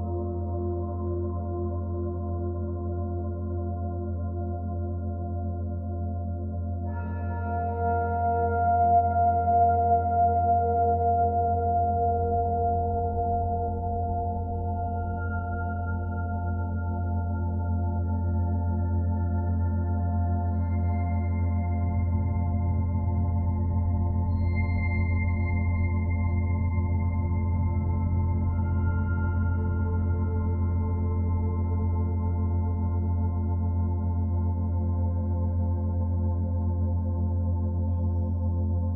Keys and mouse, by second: 1.5 e, 2.5 Return, 3.9 s, 5.1 Escape, 6.3 click, 6.9-7.8 typing, 8.7-11.5 drag, 11.0 ctrl+z, 11.5 ctrl+z, 12.7 ctrl+z, 13.5 ctrl+z, 14.4 ctrl+z, 16.7-22.1 drag, 22.1 1, 22.9-27.9 ctrl+alt+drag, 27.9-29.1 typing, 28.6 click, 29.4 shift+click, 30.4 typing, 31.0 click, 31.8 shift+click, 33.1 typing, 34.0 click, 34.7 shift+click, 37.1 click, 37.9 shift+click.